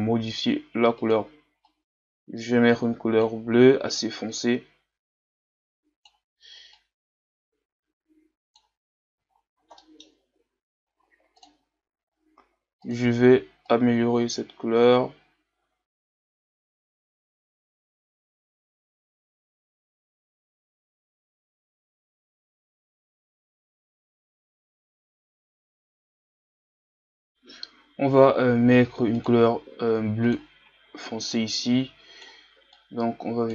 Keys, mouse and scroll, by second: 9.3-9.8 scroll up 2, 9.8-11.7 middle drag, 11.7 click, 13.7 click, 16.5 a, 16.6 scroll down 2, 16.7 middle click, 16.8 scroll up 2, 16.9-18.0 middle drag, 18.0 click, 19.6 middle click, 20.1 scroll down 3, 20.2 middle click, 20.6 right click, 20.9 click, 22.6-23.7 drag, 23.8 click, 24.3 middle click, 24.4-24.9 scroll up 2, 24.5 middle click, 24.9-26.4 drag, 26.4 a, 26.5-26.9 scroll down 6, 26.6 middle click, 26.9 middle click, 27.1 scroll up 2, 27.2 click, 29.3-31.3 drag.